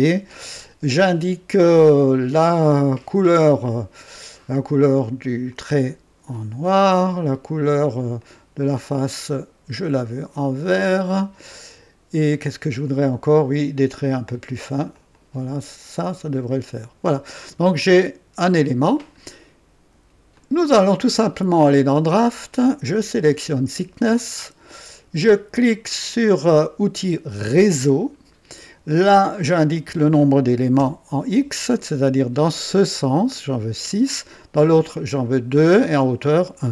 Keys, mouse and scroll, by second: 3.9 click, 5.4 click, 6.6 click, 8.2 click, 9.1 click, 10.6 click, 12.3 click, 13.7 click, 14.9 click, 15.9 click, 16.5 click, 17.3-18.7 drag, 20.3 click, 21.8 click, 23.2 click, 27.5 click, 29.3 click, 30.8 KP_6.